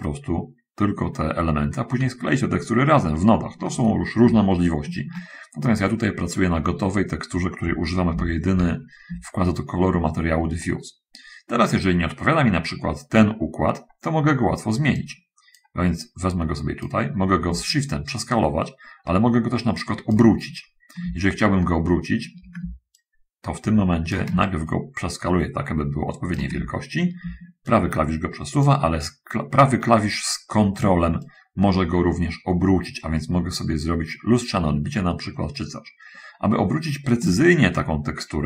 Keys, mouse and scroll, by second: 4.8 shift+middle click, 8.4 7, 10.1 shift+middle click, 15.2 right click, 16.4-17.4 right drag, 18.0-20.6 shift+right drag, 22.0 shift+middle click, 23.3 shift+right click, 24.7-26.8 shift+right drag, 28.0 shift+right click, 31.6-37.8 ctrl+right drag.